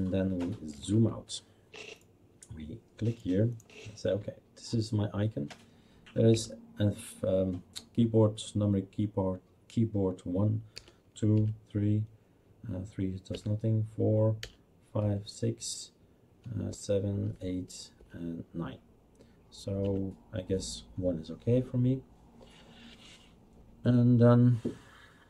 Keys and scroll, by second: 6.3 1, 10.5-11.8 typing, 13.3-15.5 typing, 16.7-18.0 typing, 19.8 1.